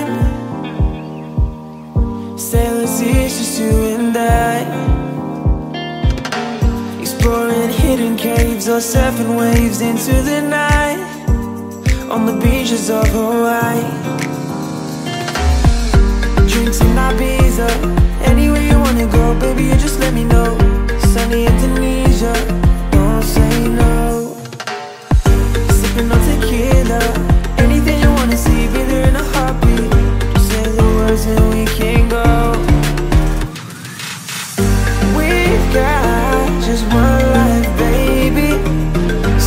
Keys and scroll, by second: 7.1 Delete, 21.8 ctrl+c, 22.0 Tab, 23.6 ctrl+v, 24.0 ctrl+a, 25.5 ctrl+t, 33.9 ctrl+t, 37.0 Return, 38.4 BackSpace, 38.5 Return.